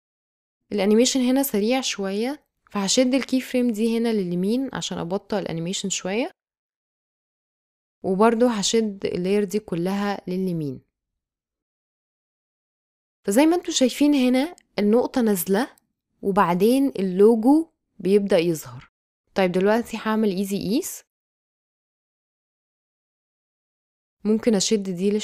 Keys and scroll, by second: 12.8 space, 16.7 space, 19.8 F9, 20.7 space, 23.8 space.